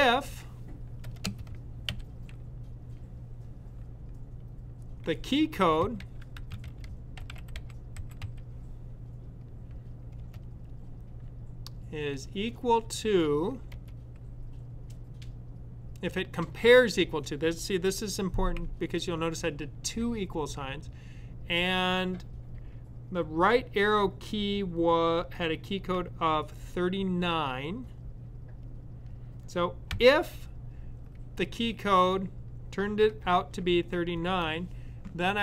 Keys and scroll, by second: 0.0-1.8 typing, 5.9-8.5 typing, 12.0-12.4 typing, 26.3-27.0 typing, 29.7 typing.